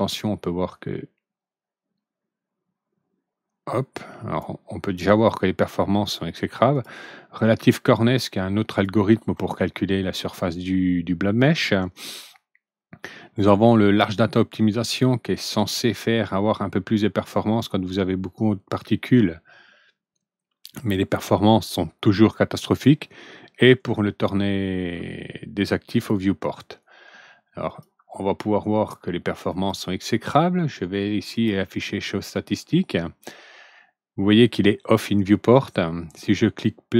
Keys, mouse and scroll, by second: 0.1-4.3 drag, 6.6 click, 8.6 click, 14.6 click, 16.2-21.2 drag, 22.6 click, 25.8 click, 27.6 click, 29.4 click, 31.3 click, 36.0 click.